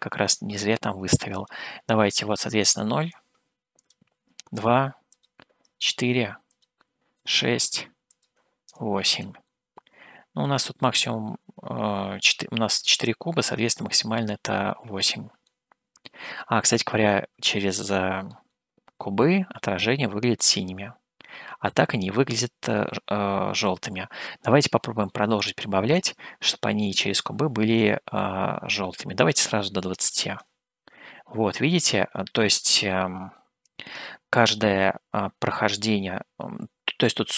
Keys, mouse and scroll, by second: 1.4-3.2 drag, 3.7-9.1 drag, 9.6-10.6 middle drag, 15.4-18.6 middle drag, 20.4-25.8 middle drag, 29.3-30.5 drag.